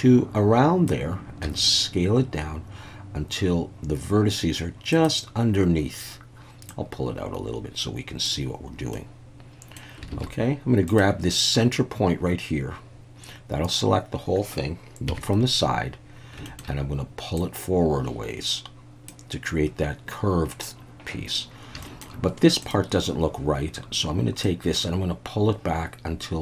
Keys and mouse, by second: 1.4 s, 4.9 click, 6.7-8.2 drag, 8.9 middle click, 10.1 alt+a, 10.9 click, 15.1 KP_3, 16.5 shift+middle click, 17.4-19.1 drag, 21.8 shift+middle click, 24.5-26.4 drag.